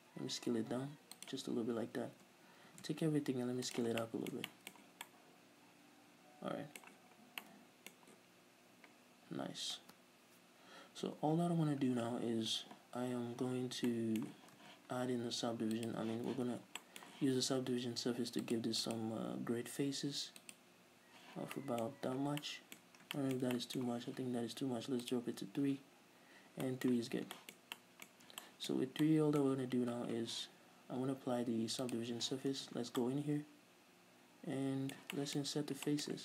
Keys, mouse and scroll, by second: 1.6 click, 2.4 a, 2.9 s, 4.0 shift+click, 4.3-8.2 middle drag, 7.5 scroll down 2, 12.3-14.1 middle drag, 14.3-16.0 middle drag, 14.9 Tab, 16.0 click, 16.6 z, 17.1-18.8 middle drag, 18.8-21.5 drag, 21.8-23.9 middle drag, 22.4 scroll up 2, 25.4 click, 26.5-26.9 scroll down 2, 26.9-27.4 middle drag, 27.2 z, 27.4 scroll down 2, 27.6-32.1 middle drag, 28.4 scroll up 2, 32.1 click, 32.9 Tab, 33.3-36.2 middle drag, 35.7-36.1 scroll up 2.